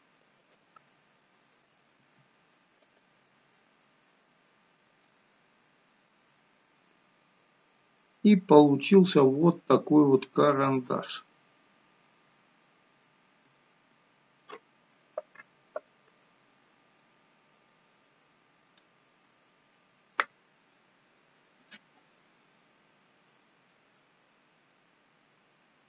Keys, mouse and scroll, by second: 0.8-1.3 scroll down 6, 1.3 middle click, 2.0 r, 3.3 middle click, 4.5 scroll up 3, 5.2 scroll up 3, 5.4 middle click, 6.3 scroll up 2, 7.6 scroll down 2, 9.0 scroll down 1, 9.5 shift+middle click, 10.4 middle click, 16.0 middle click, 17.7 middle click.